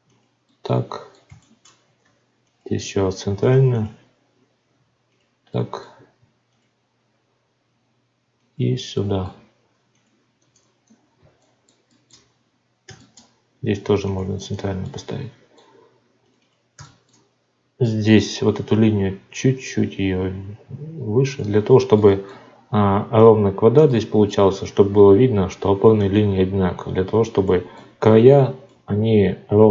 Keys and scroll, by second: 2.0 ctrl+r, 3.4 ctrl+r, 6.1 ctrl+r, 9.6 ctrl+r, 13.7 ctrl+r.